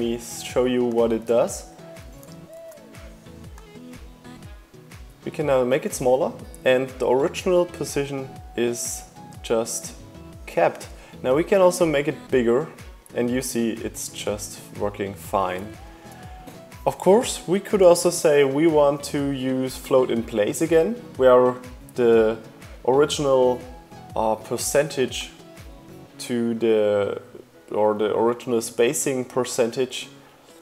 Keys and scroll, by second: 1.8 super+z, 13.7 super+z.